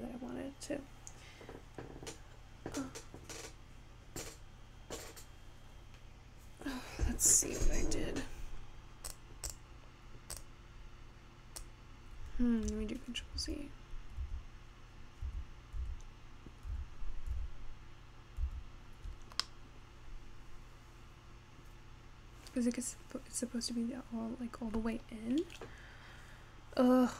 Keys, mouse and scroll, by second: 9.1 drag, 9.5 click, 10.3 click, 11.6 click, 13.0 ctrl+z, 13.5 ctrl+z, 14.4 ctrl+z, 15.4 ctrl+z, 15.9 ctrl+z, 16.8 ctrl+z, 17.5 ctrl+z, 18.6 ctrl+z, 19.4 scroll down 1, 19.5-22.6 middle drag, 25.1-26.1 scroll up 1, 26.1-27.1 scroll down 3.